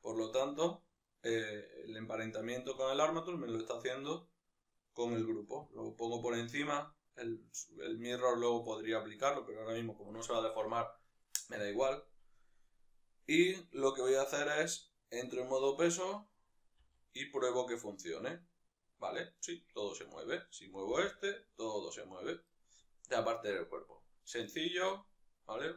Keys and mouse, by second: 0.2-5.8 right drag, 5.8-14.3 drag, 14.3 right click, 15.3 Tab, 15.7-16.9 right drag, 16.9 r, 20.0 right click, 21.0 g, 22.7 right click, 24.6-25.7 shift+middle drag.